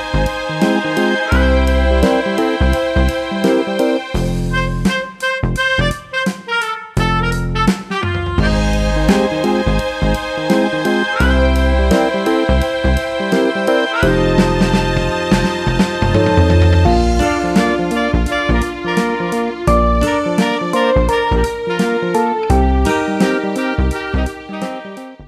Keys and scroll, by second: 8.9 Return, 8.9 typing, 16.1-17.0 typing.